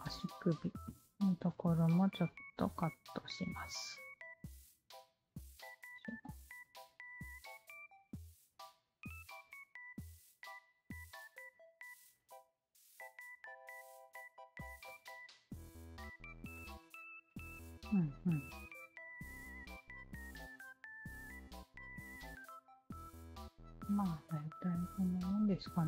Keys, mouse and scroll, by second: 0.0-1.8 drag, 2.4 shift+q, 2.8 alt+middle click, 3.1 alt+click, 3.8 w, 4.2 alt+click, 5.1-6.1 alt+drag, 6.6 alt+click, 7.4-9.0 alt+drag, 9.4-11.0 alt+drag, 11.7 alt+click, 12.2 alt+click, 12.9-14.1 alt+drag, 14.6 alt+click, 14.8-16.0 alt+drag, 16.3 alt+middle click, 16.5-18.9 alt+drag, 19.1 alt+middle click, 19.5-20.5 alt+drag, 21.8 alt+click, 22.4 alt+middle click, 22.6-24.5 alt+drag, 25.0 alt+click.